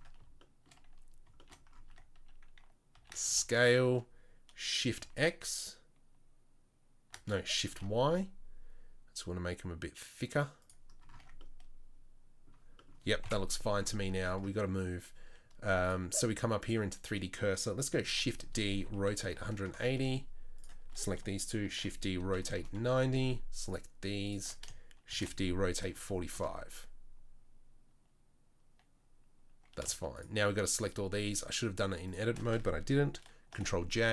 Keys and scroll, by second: 1.9 Tab, 2.9 a, 3.3 s, 11.1 Tab, 13.2 KP_7, 18.0 shift+d, 18.8 r, 21.6 shift+d, 25.1 shift+d, 33.5 ctrl+j.